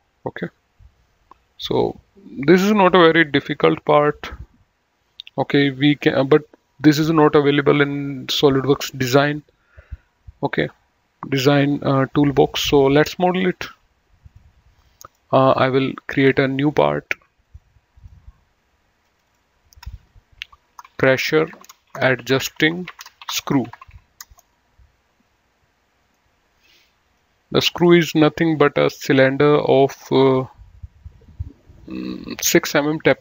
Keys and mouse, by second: 14.5 click, 16.9 click, 19.9 F2, 20.8-24.7 typing, 26.2 right click, 27.4 click, 29.0 click.